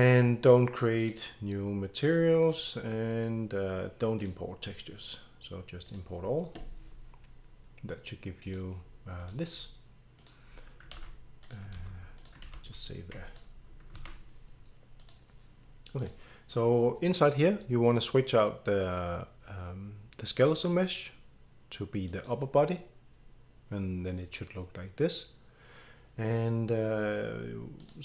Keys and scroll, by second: 10.9 ctrl+s, 11.8 ctrl+s, 12.4 ctrl+s.